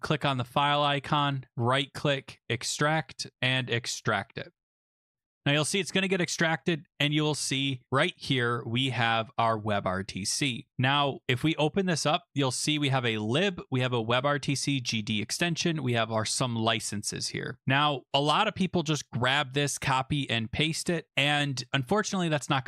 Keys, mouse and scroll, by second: 0.0 click, 1.3 right click, 2.4 click, 3.7 click, 4.1 click, 10.1 click, 11.3 click, 11.5 click, 12.8 click, 13.8 click, 17.7 click, 19.0 click, 21.5 click, 22.1 click.